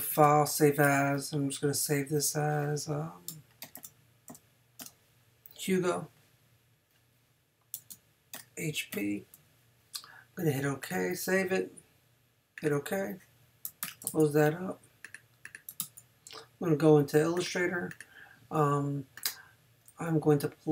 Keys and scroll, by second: 0.1 shift+super+s, 3.4-4.8 typing, 7.9 shift+-, 8.3 shift+h, 8.9 shift+p, 13.8 super+w, 14.1 super+Tab, 15.8 super+Tab.